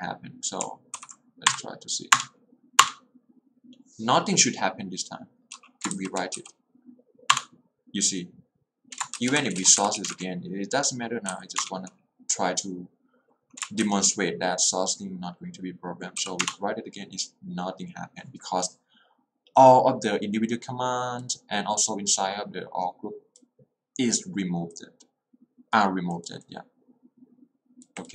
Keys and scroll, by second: 1.1 alt+l, 1.6 Up, 2.2 Return, 6.4 w, 7.5 Return, 9.3-10.6 typing, 11.3 Up, 11.7 Return, 16.3 w, 16.5 Return.